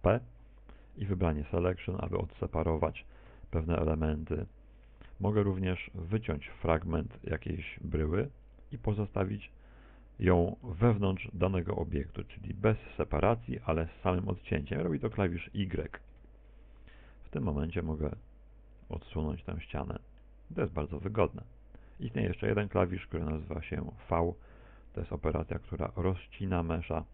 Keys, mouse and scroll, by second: 0.4 shift+right click, 0.8 shift+right click, 1.7 p, 3.6 g, 4.1 Escape, 4.4 right click, 5.3 Tab, 5.8 right click, 6.2 g, 6.6 click, 7.4 right click, 8.3 right click, 8.6 Tab, 9.3 right click, 9.6 shift+right click, 10.2 right click, 10.6 right click, 11.1 middle click, 12.6 middle click, 13.2 middle click, 17.2 y, 17.7 Return, 20.2 g, 21.4 click, 21.4 middle click, 24.2 middle click, 25.6 right click.